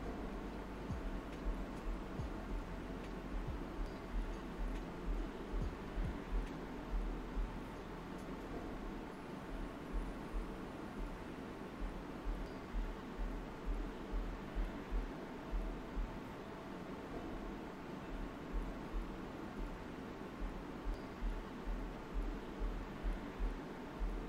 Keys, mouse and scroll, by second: 0.9 alt+right click, 2.1-10.4 drag, 10.4-12.9 right drag, 12.9 right click, 14.1 alt+right click, 15.0 alt+right click, 16.3 alt+right click, 17.4 alt+right click, 18.5 typing, 22.7 middle click.